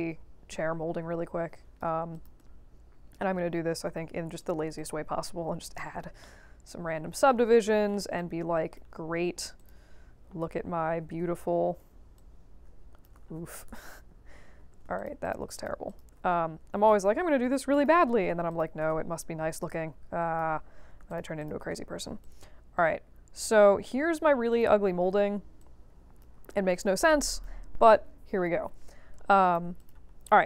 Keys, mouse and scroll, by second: 2.1 click, 2.3 right click, 4.3 click, 4.7 click, 5.6 click, 6.2-7.8 middle drag, 8.1 right click, 9.5 click, 10.2 b, 11.1 w, 12.1-13.0 drag, 13.2 ctrl+z, 13.6 b, 14.5 q, 14.9 shift+click, 15.2 shift+click, 15.5 shift+click, 15.8 shift+click, 16.8-17.8 drag, 17.9 q, 18.4 ctrl+click, 19.5 click, 20.4 q, 21.0 ctrl+click, 21.3 ctrl+click, 21.7 w, 22.2-23.8 drag, 24.1 q, 24.5 click, 25.0 w, 25.5-26.2 drag, 26.7 q, 26.8 right click, 27.9 right click, 28.7 middle click, 28.7 scroll down 2, 29.3 alt+drag, 29.7 click, 30.0 scroll up 2.